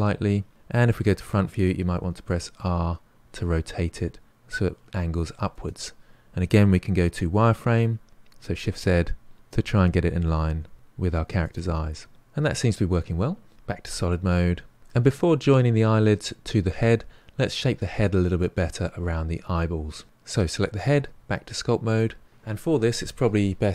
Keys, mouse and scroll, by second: 0.9 KP_1, 1.9 r, 8.1 z, 10.6 r, 13.5 shift+z, 14.3 middle click, 18.6-20.0 middle drag, 20.3 click, 21.9 click.